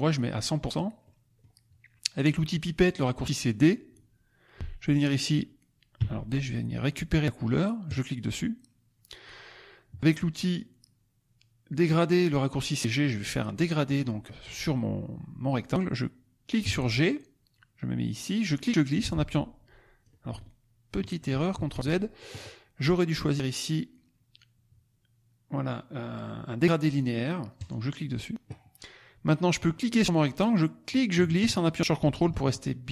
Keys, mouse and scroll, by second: 0.3 click, 1.0 click, 4.6 c, 6.0 d, 7.9 click, 16.5 g, 18.4-20.1 drag, 21.4 ctrl+z, 27.5 click, 30.9-32.9 drag.